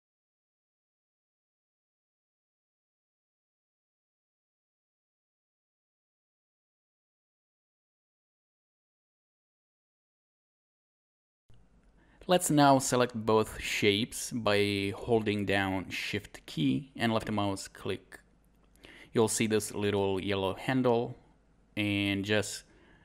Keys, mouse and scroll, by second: 0.2 right click, 1.5 Escape, 1.7 click, 4.0 click, 5.3 click, 5.7 right click, 6.0 shift+click, 6.1 click, 7.1-8.0 scroll up 1, 8.1 click, 9.5 scroll down 1, 9.6 scroll up 1, 9.8 click, 11.0 scroll down 1, 17.4 alt+click, 18.4 alt+right click, 20.9 alt+click.